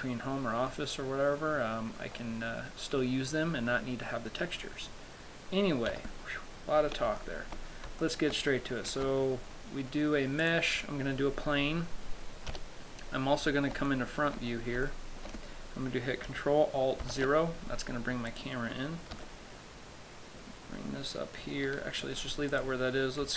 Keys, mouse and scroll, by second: 0.9 middle click, 2.4 middle click, 6.2 KP_7, 7.1-8.3 scroll down 5, 7.5 shift+middle click, 8.3 shift+middle click, 9.2 shift+a, 12.8 KP_1, 13.6-14.2 scroll up 4, 14.2 shift+middle click, 14.8-15.1 scroll up 2, 15.1 shift+middle click, 17.4 ctrl+alt+KP_0, 18.6 right click, 22.8 right click.